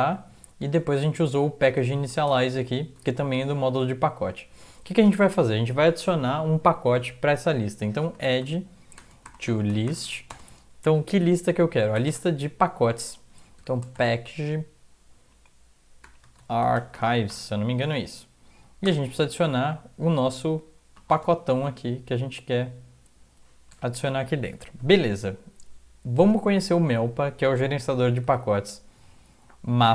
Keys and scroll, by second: 0.0 Down, 0.2 Down, 0.3 Down, 0.8 Left, 1.7 Right, 2.4 ctrl+shift+Left, 2.4 typing, 2.6 ctrl+shift+Left, 3.4 Up, 3.6 Up, 3.8 Up, 7.8-10.6 typing, 12.1 typing, 13.4-17.8 typing, 18.9 Return, 21.1 ', 28.4 alt+Tab.